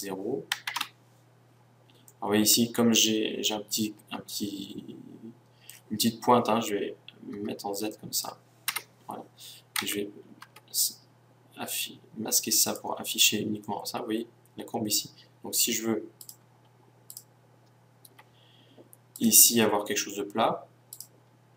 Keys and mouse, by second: 2.1-4.1 middle drag, 7.3 z, 8.7 KP_1, 9.8 Tab, 10.5 Tab, 12.7-14.5 drag, 14.7 middle click, 16.2-19.1 right drag, 19.2-21.5 right drag.